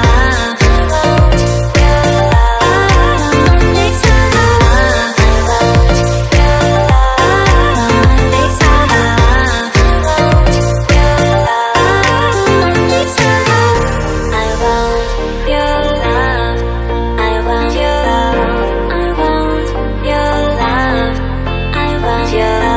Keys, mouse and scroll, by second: 0.6 click, 1.6 click, 2.9 click, 4.5 click, 6.0 click, 7.2 click, 9.7 right click, 10.5 click, 11.2 click, 12.8 ctrl+z, 13.6 click, 14.1 click, 16.2 click, 17.2 click, 18.1 click, 18.7 click, 19.0 double click, 20.9 click, 22.4 click.